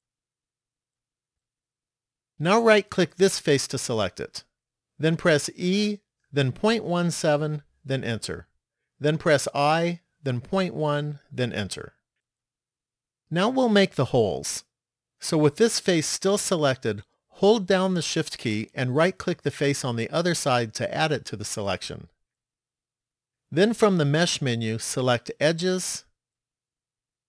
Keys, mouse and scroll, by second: 0.2 middle click, 3.6 right click, 5.4 e, 9.7 i, 16.5 middle click, 20.3 shift+right click, 23.3 click.